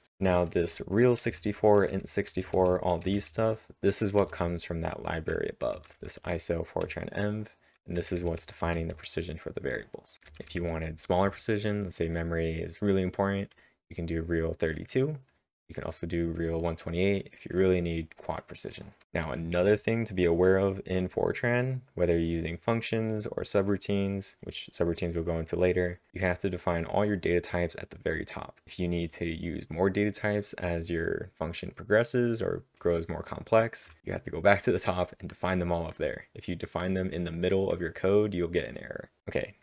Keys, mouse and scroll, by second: 0.0-6.1 typing, 7.3-11.7 typing, 13.0-13.7 typing, 19.0 typing.